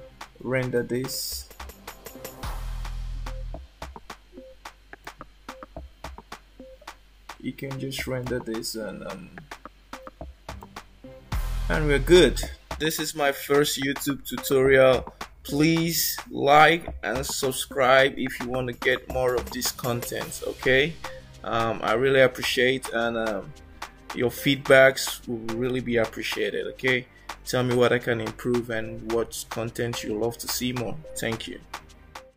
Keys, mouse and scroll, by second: 0.7 click, 2.0 g, 8.2 click.